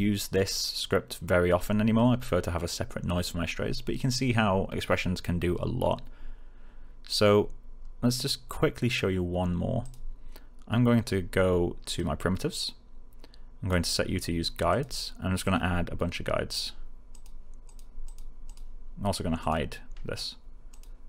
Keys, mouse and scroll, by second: 9.7 click, 11.8 click, 13.6 click.